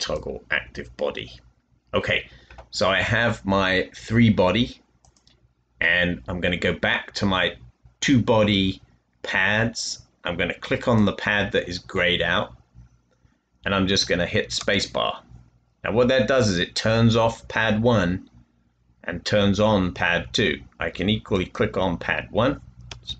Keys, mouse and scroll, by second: 14.7 space, 22.8 space.